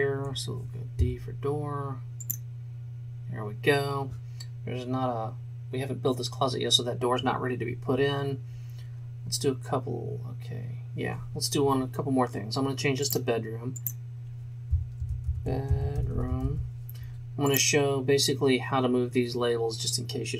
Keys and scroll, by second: 1.1 d, 15.0-16.4 typing.